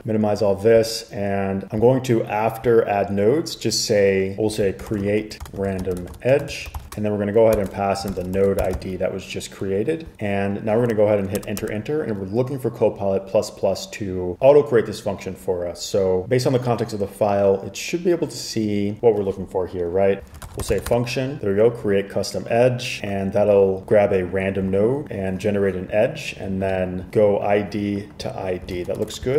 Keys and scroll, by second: 4.5-9.4 typing, 9.7 Escape, 11.5 Return, 11.7 Return, 20.1-21.5 typing, 23.1 typing, 28.9 super+s, 29.2 super+Tab.